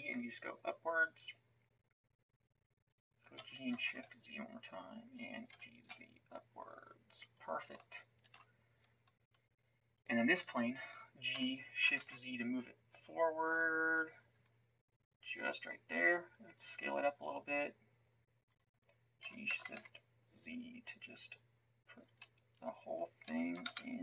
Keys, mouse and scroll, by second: 3.3 g, 5.5 g, 8.2 ctrl+s, 11.3 g, 16.5 s, 19.2 g, 23.2 g.